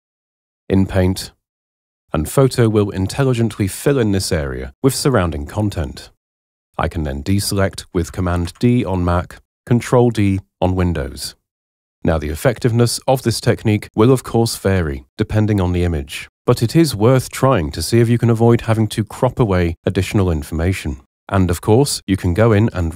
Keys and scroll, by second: 8.4 super+d, 18.2 [.